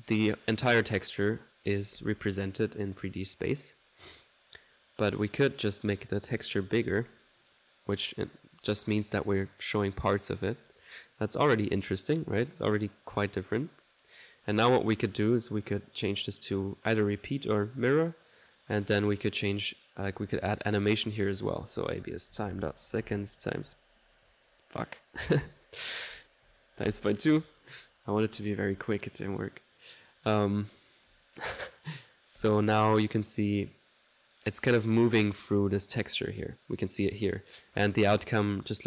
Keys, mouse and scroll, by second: 3.7-4.8 drag, 5.7-7.1 drag, 7.9 click, 12.4 click, 13.0 click, 13.8 click, 14.3 right click, 14.5-15.5 drag, 15.7 click, 16.4 click, 17.9 click, 18.4 click, 19.1 click, 21.1 click, 31.1 click, 32.4 ctrl+1, 36.0 click, 36.2-38.1 middle drag.